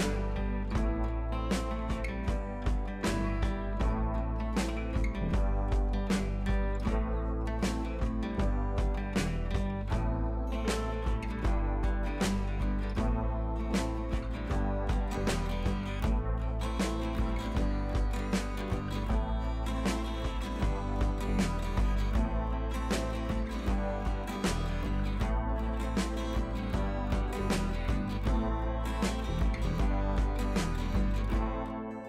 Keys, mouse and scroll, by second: 0.4 ctrl+t, 0.7 right click, 1.6-5.3 drag, 10.1-11.6 ctrl+drag, 12.6 right click, 13.5-14.9 drag, 16.6-17.8 ctrl+drag, 18.7 scroll down 1, 19.5 click, 20.0 ctrl+t, 20.4 right click, 21.7-24.4 drag, 29.0-29.4 drag.